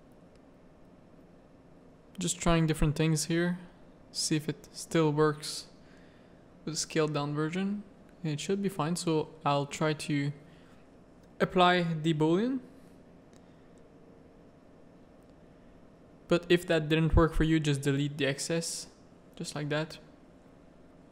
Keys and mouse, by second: 2.1 click, 3.6 middle click, 5.8 middle click, 10.7 ctrl+a, 14.0 Tab, 14.3 a, 14.6-15.8 drag, 17.1 Tab, 18.0 x, 18.6 z, 19.4 middle click, 20.0 Tab, 20.1 a, 20.5 middle click.